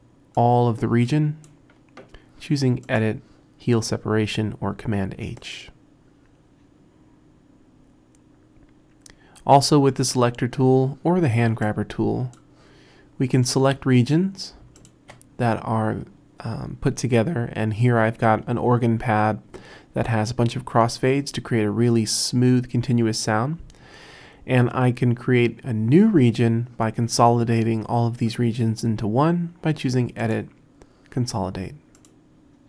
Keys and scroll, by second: 10.0 r.